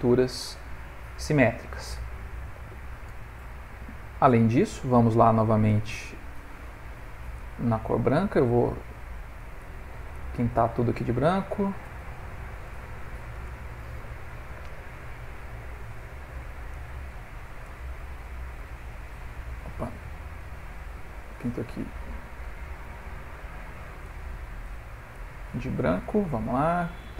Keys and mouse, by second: 0.2 ctrl+middle click, 0.9 click, 5.6 click, 8.0 click, 8.6 click, 9.2 click, 9.6 click, 10.2-10.8 click, 10.4 click, 10.6 click, 11.0-11.7 click, 11.3 click, 11.5 click, 12.2 shift+click, 16.7 click, 17.1 f, 18.0 click, 20.3 click, 21.2 click, 25.4 click.